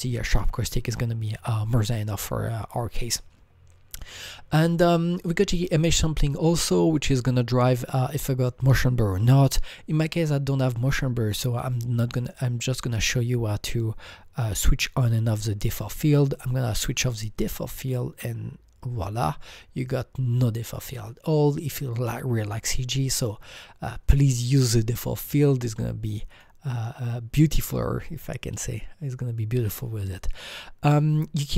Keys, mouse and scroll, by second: 4.0 click, 5.2 click, 16.3 click, 17.8-18.1 drag, 20.7 click, 23.4 click, 25.2 click, 26.3 click, 26.8 click, 30.0 click, 30.1 click.